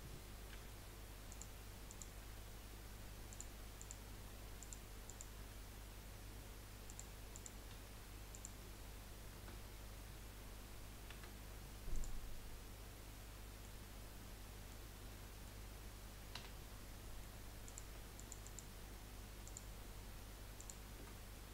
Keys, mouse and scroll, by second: 0.5 g, 1.9 click, 3.8 click, 5.0 click, 5.6 g, 7.3 click, 7.9 g, 9.4 a, 11.2 F3, 12.7-13.2 scroll down 4, 13.2 middle click, 14.0 scroll down 3, 14.2-16.3 middle drag, 16.7 scroll up 1, 17.0 middle click, 17.6 click, 18.2 alt+shift+click, 18.5 alt+shift+click, 19.4 alt+shift+click, 20.6 alt+shift+click, 21.3-21.5 middle drag.